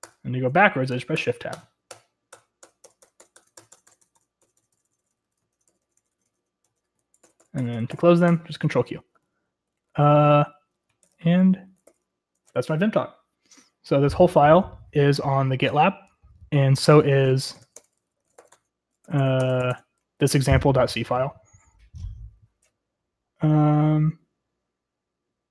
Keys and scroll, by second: 1.2 Tab, 1.9 shift+Tab, 2.1 shift+Tab, 2.3 shift+Tab, 2.6 shift+Tab, 2.8 shift+Tab, 3.2 shift+Tab, 3.3 shift+Tab, 3.9 Tab, 4.0 Tab, 4.2 Tab, 4.6 Tab, 4.7 Tab, 5.0 Tab, 5.1 Tab, 5.5 Tab, 6.1 shift+Tab, 6.6 shift+Tab, 7.2 ctrl+q, 7.4 ctrl+q, 7.6 ctrl+q, 7.7 ctrl+q, 7.9 ctrl+q, 9.1 ctrl+q, 9.1-13.2 typing, 17.2-20.6 typing, 22.0-23.1 typing.